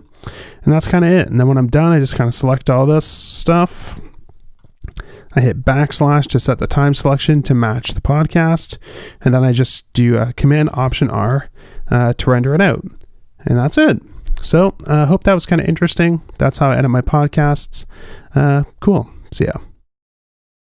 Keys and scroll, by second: 13.5 alt+super+r, 15.3 1, 15.7 5, 16.5 Escape.